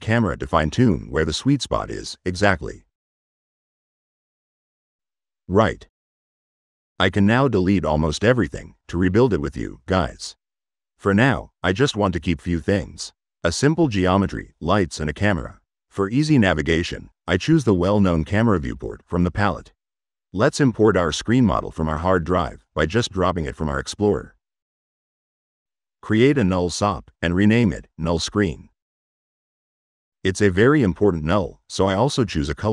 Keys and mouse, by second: 4.0 click, 5.9-7.9 drag, 10.0 Delete, 10.9 click, 12.1 Delete, 24.3 click, 26.7 click, 27.4 click, 28.0 click, 32.6 click.